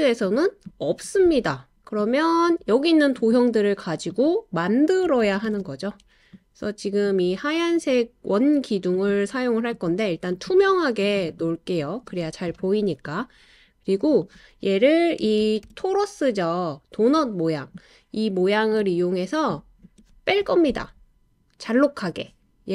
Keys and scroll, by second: 5.2 super+c, 5.4 super+v, 15.4 super+c, 15.6 super+v.